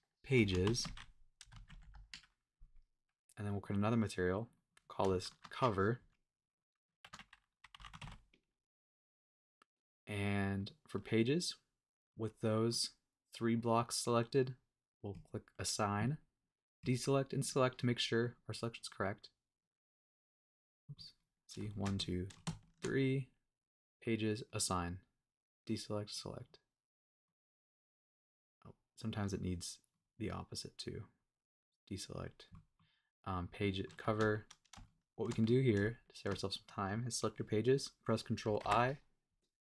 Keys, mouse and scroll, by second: 3.5 click, 4.5 click, 6.5-9.2 drag, 10.6 click, 12.7-14.0 middle drag, 15.1 click, 16.8 click, 17.3 click, 17.7 middle click, 18.9 click, 19.6 click, 20.8 middle click, 21.1 click, 21.7 shift+click, 21.9 middle click, 22.6 shift+click, 23.9 click, 24.5 click, 24.7 click, 25.6 click, 26.1 click, 26.4 click, 27.2 middle click, 28.3 click, 29.3 click, 29.9 click, 31.6 click, 32.1 click, 32.5 middle click, 33.2 click, 33.6 middle click, 34.8 shift+click, 35.1 shift+click, 35.4 middle click, 36.2 shift+click, 36.6 middle click, 38.6 super+i.